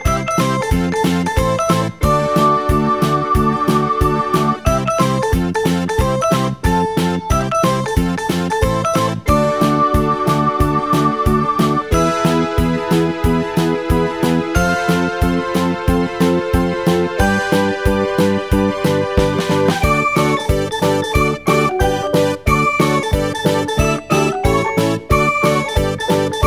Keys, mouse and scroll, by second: 9.2-12.2 drag, 17.9 g.